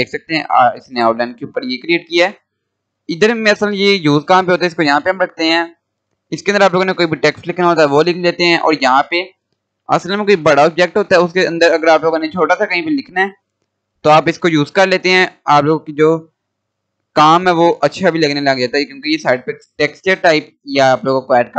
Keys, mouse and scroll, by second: 2.0 scroll down 1, 4.0-6.9 drag, 9.1-10.0 scroll down 1, 10.0-12.4 drag, 13.0-13.4 scroll up 1, 13.7 click, 15.5 scroll up 1.